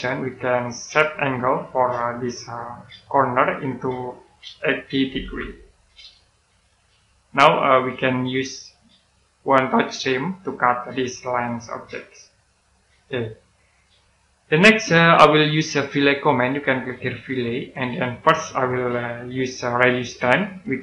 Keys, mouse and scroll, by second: 3.6 click, 5.0 typing, 6.1 click, 12.9-13.3 scroll down 1, 13.3 middle click, 17.4 click, 20.1 click.